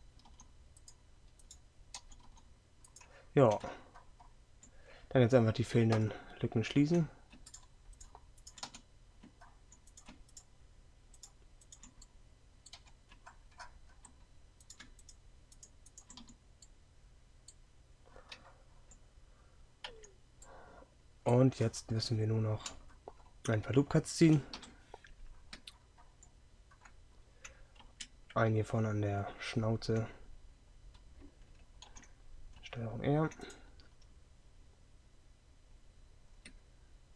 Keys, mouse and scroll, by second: 0.0 g, 8.8 f, 12.9 f, 16.7 f, 20.1 Tab, 24.6 KP_3, 27.9 Tab.